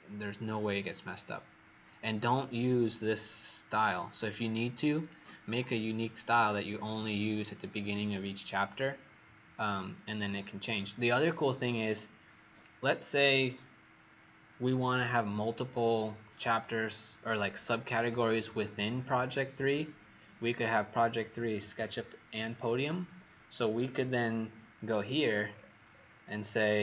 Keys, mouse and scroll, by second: 3.2-4.0 alt+scroll up 2, 4.2 click, 25.2-26.8 scroll down 16.